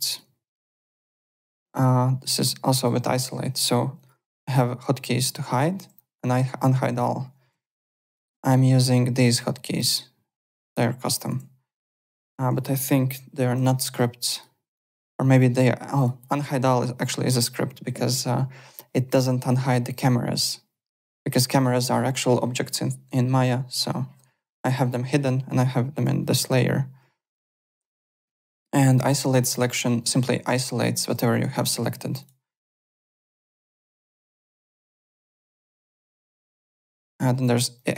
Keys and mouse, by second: 0.1 click, 0.5 alt+middle click, 0.7 alt+right click, 1.1 click, 1.7 alt+Tab, 2.7 click, 3.9 click, 4.4 ., 4.8 ,, 5.7 ., 7.5 alt+Tab, 8.0 alt+click, 11.3 alt+Tab, 12.2 alt+click, 13.1 Home, 14.3 click, 15.9 click, 17.0 click, 25.9 click, 27.2 click, 28.0 click, 29.2 /, 30.4 /, 32.2 click, 32.4 /, 33.8 alt+Tab, 34.5 alt+click, 35.2 alt+Tab, 35.8 alt+click, 36.6 click, 37.3 alt+Tab, 37.7 alt+click.